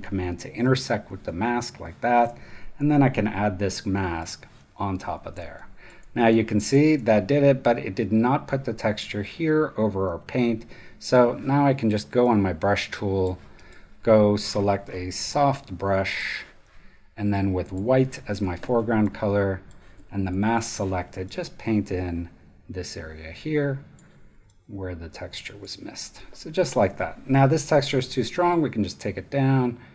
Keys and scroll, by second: 5.3 space, 10.7 b, 26.9 v.